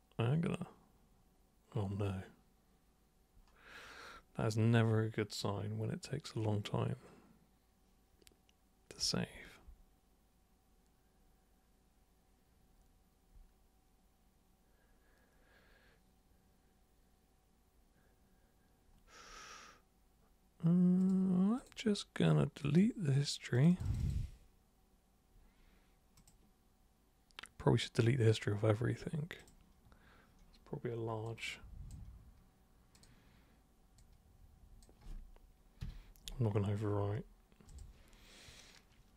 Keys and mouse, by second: 21.0 super+click, 21.5 super+click, 22.6 super+click, 23.5 super+click, 24.0 super+click, 26.1 super+click, 29.3 super+click, 31.2 super+click, 32.9 super+click, 34.0 super+click, 37.6 super+click.